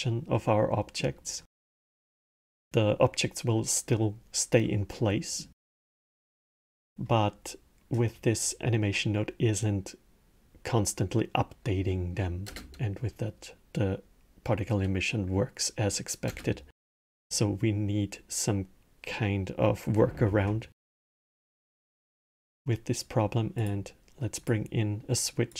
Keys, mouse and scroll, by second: 0.5-3.6 middle drag, 4.9-9.2 middle drag, 11.6-12.2 middle drag, 12.2 space, 16.0 space, 16.5-19.6 middle drag, 20.0 shift+a, 25.2 drag.